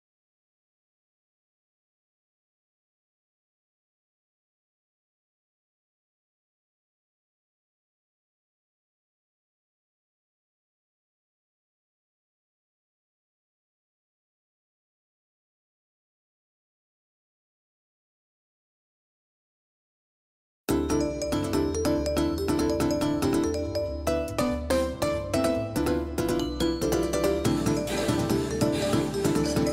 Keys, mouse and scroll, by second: 0.2 g, 3.1-5.4 right drag, 4.1-6.3 drag, 8.1 ctrl+z, 8.7 middle click, 10.0 middle click, 15.4-17.7 right drag, 17.7 r, 18.8 Escape, 20.3-24.1 right drag, 24.5-26.2 middle drag, 26.2-29.7 typing.